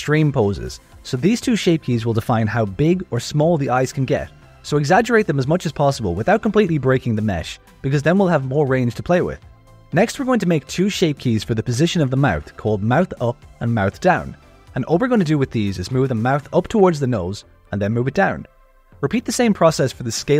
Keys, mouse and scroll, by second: 1.9 click, 2.6-4.2 drag, 4.5 click, 7.8 click, 10.4 click, 10.7 shift+click, 11.2 click, 11.4 Tab, 11.5 z, 11.7 alt+a, 11.7 click, 11.8 z, 11.9 g, 13.3 alt+shift+a, 13.6 s, 13.8 alt+shift+click, 13.9 s, 14.3 click, 14.4 g, 14.5 click, 14.6 g, 14.8 Tab, 15.2 click, 15.4 click, 15.7 shift+click, 16.2 click, 16.3 Tab, 16.4 z, 16.6 alt+a, 16.6 click, 16.7 z, 16.7 g, 17.8 Tab, 18.0 click, 18.9 click, 19.8 click, 19.9 Tab, 20.1 alt+a, 20.1 click, 20.3 ctrl+KP_Add.